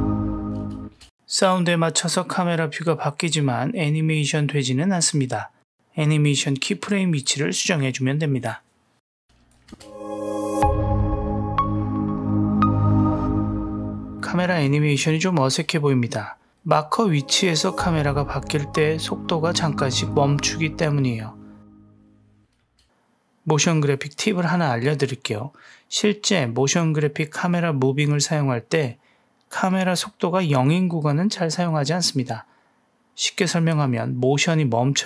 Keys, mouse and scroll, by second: 0.8 space, 3.2-3.8 drag, 4.1 click, 4.5 click, 5.1 g, 6.0 click, 6.3 click, 6.8 g, 7.3 click, 7.9 g, 9.1-9.5 drag, 9.7 space, 15.4 space, 16.6 click, 16.8 space, 22.6 space, 23.9 click, 24.2 space, 30.0 space, 31.3 click, 31.6 space.